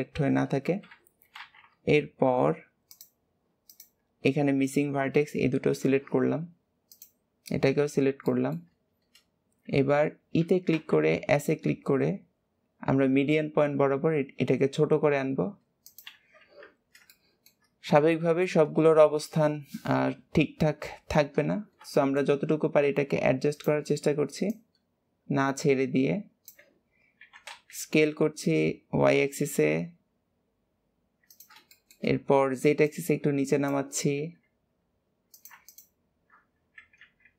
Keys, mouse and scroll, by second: 0.0-0.8 scroll up 1, 0.8 alt+z, 2.9 shift+click, 3.6 shift+click, 6.8 shift+click, 7.7 scroll up 1, 8.1 shift+middle click, 8.7-10.3 scroll down 1, 10.3 e, 17.0-21.2 shift+middle drag, 21.9 shift+middle click, 22.7 s, 24.4 click, 31.7-32.8 shift+middle drag, 32.8 click, 34.0 s, 35.3 click, 35.6 alt+shift+click, 36.5 s.